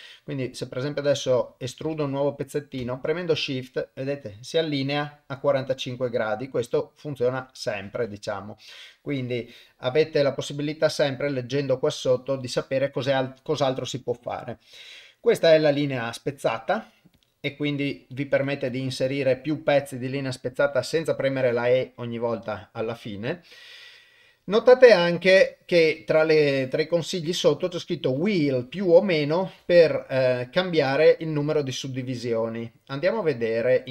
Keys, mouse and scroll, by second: 15.2 click, 16.4-33.1 drag.